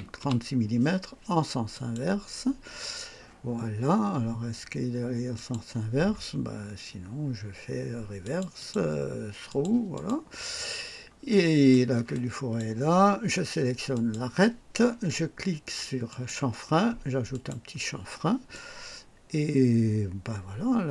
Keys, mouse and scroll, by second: 0.2 KP_6, 1.7 click, 5.3 click, 6.7 scroll down 1, 8.2 click, 8.6 click, 9.5 click, 9.9 click, 10.8 scroll down 1, 11.3 right click, 12.1 click, 13.9 click, 16.1 click, 17.3 click, 18.5-20.9 drag.